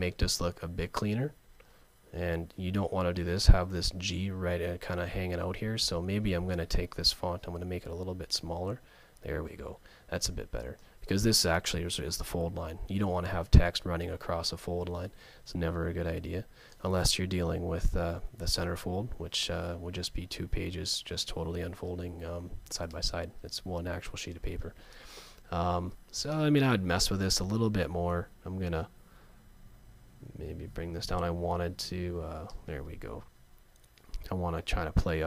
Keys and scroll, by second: 7.0 shift+super+,, 17.4 Left, 18.9 Down, 19.5 Right, 20.3 Up, 33.4 Left, 35.1 Right.